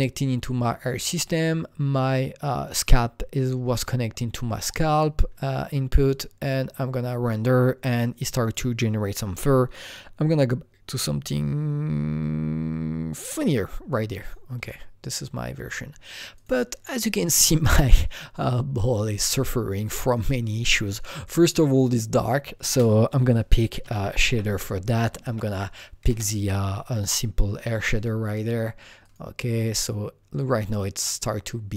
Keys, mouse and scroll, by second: 6.0-8.4 drag, 8.4-10.3 drag, 10.3-16.3 drag, 16.3-19.0 drag, 19.5-22.6 drag, 22.6 ctrl+space, 23.8-24.3 typing, 25.2 Down, 26.0 Return, 26.8-31.6 drag.